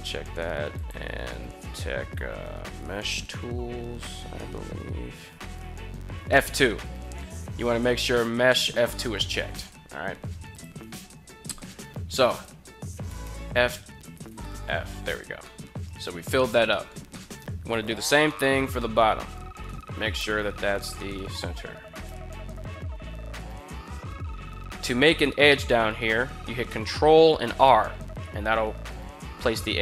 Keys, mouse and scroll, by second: 12.0 right click, 12.9 f, 13.1 f, 13.7 right click, 14.1 f, 14.3 f, 15.2 middle click, 16.4 middle click, 16.9 middle click, 17.5 right click, 18.1 middle click, 18.5 middle click, 19.9 KP_1, 20.6 middle click, 21.7 shift+right click, 22.2 g, 22.3 f, 22.3 right click, 22.5 f, 22.6 right click, 22.8 f, 23.3 middle click, 24.1 middle click, 24.6 shift+middle click, 27.1 ctrl+r.